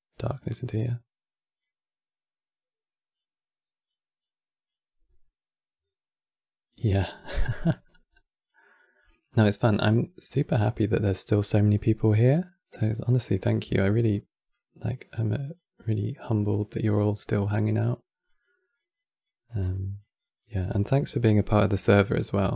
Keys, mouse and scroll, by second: 13.3 f, 14.2-20.5 drag, 20.5-22.5 shift+middle drag.